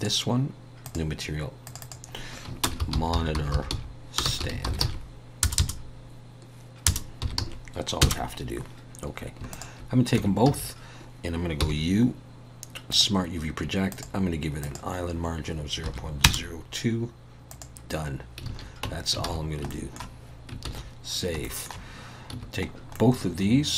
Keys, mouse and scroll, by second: 2.5 click, 5.6 BackSpace, 9.5 shift+click, 10.2 Tab, 10.5 a, 11.6 u, 18.5 alt+a, 18.8 Tab, 19.2 alt+a, 19.7 shift+middle click, 20.7 ctrl+s, 21.4 shift+middle click, 22.3 a, 22.7-23.7 scroll down 2, 22.9 middle click.